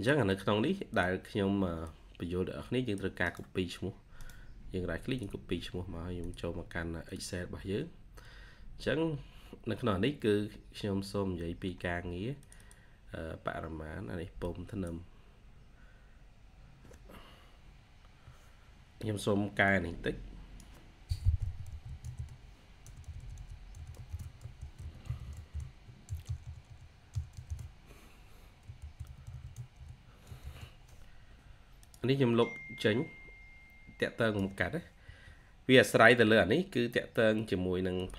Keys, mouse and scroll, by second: 3.2 right click, 9.3-10.3 scroll up 1, 10.3-10.7 scroll down 1, 12.4 double click, 20.9-23.2 typing, 24.5-26.3 typing, 29.0 typing, 32.0-32.4 scroll down 1, 32.1-32.9 typing, 38.0 double click.